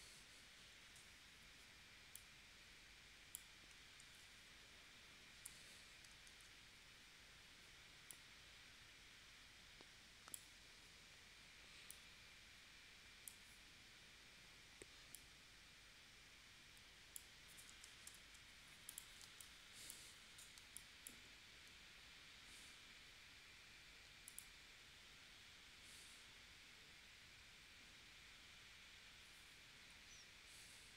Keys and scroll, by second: 4.0 shift+w, 5.5 v, 18.0 shift+super+p, 19.2 space, 20.6 space.